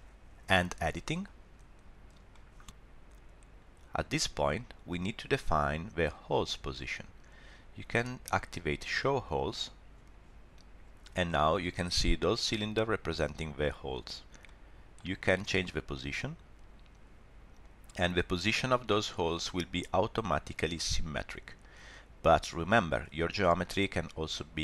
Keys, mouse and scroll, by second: 1.2 click, 2.3 middle click, 9.2 click, 10.7-11.1 scroll up 3, 11.2 shift+middle click, 14.4 middle click, 15.8 click, 17.6 click, 19.1 click, 21.9 middle click, 23.7 shift+middle click.